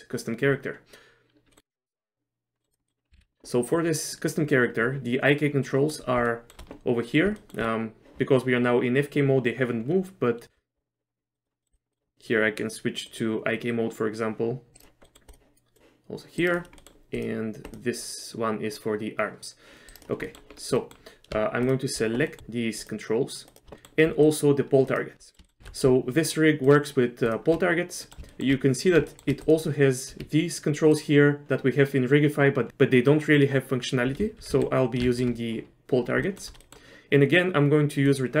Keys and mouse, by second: 1.5 middle click, 1.8 click, 2.6 middle click, 3.2 ctrl+z, 5.8 middle click, 6.4 shift+middle click, 7.5 shift+middle click, 10.5 shift+middle click, 11.4 click, 11.6 middle click, 11.9 middle click, 12.1 click, 13.2-14.8 drag, 15.1 middle click, 15.8 click, 16.9 middle click, 17.3 click, 18.9-20.1 drag, 20.4 middle click, 20.9 middle click, 23.8 middle click, 24.3 shift+click, 25.0 shift+click, 25.3 middle click, 25.5 shift+middle click, 25.7 ctrl+z, 26.8 shift+click, 27.4 shift+click, 28.1 middle click, 28.4 shift+middle click, 28.8 click, 29.2 shift+middle click, 30.2 r, 34.4 ctrl+z, 34.7 ctrl+z, 35.3 ctrl+shift+z, 36.3 shift+middle click, 36.8 middle click, 38.2 click.